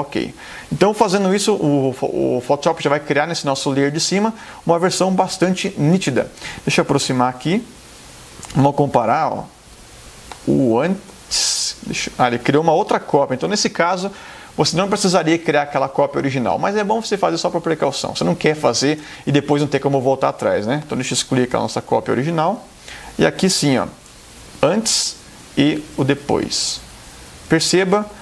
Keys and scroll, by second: 9.1 super+=, 10.5 super+space, 19.1 super+BackSpace, 27.6 space.